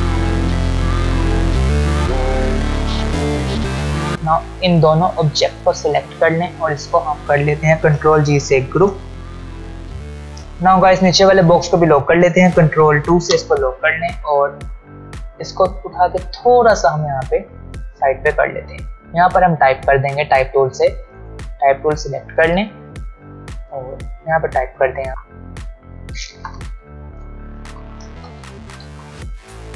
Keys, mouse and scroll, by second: 0.5 alt+scroll down 2, 0.7-1.1 alt+scroll up 4, 0.9 drag, 1.1 click, 2.1 ctrl+f, 2.3-2.6 ctrl+alt+scroll down 1, 2.6 alt+scroll up 1, 2.6 click, 3.1 alt+scroll down 1, 3.7 click, 3.8 click, 6.1 shift+click, 8.7 ctrl+g, 11.2 click, 15.2-17.7 click, 20.6 ctrl+alt+scroll up 1, 22.7 ctrl+alt+scroll down 1, 23.9 click, 26.5 Caps_Lock, 26.9-29.0 typing.